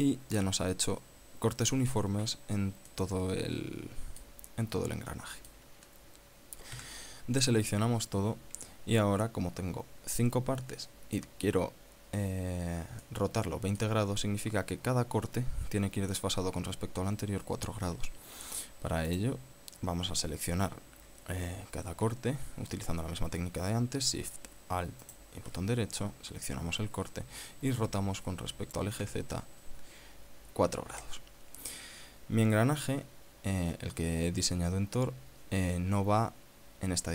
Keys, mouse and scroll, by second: 3.6-5.1 middle drag, 5.2 scroll up 1, 5.8 middle click, 7.4 a, 8.5-8.8 scroll up 2, 9.1 scroll down 2, 13.8 middle click, 19.8 right click, 25.8 alt+shift+right click, 28.5 r, 29.8 z, 31.6 KP_4.